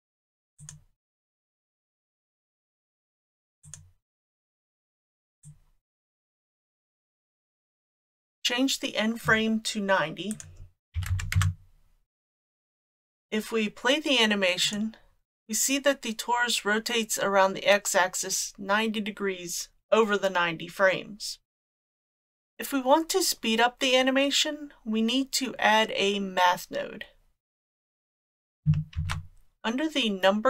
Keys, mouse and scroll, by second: 0.6-3.8 drag, 5.5-7.5 drag, 10.3-12.6 drag, 14.6 click, 22.1 click, 28.0 click, 29.0 shift+a.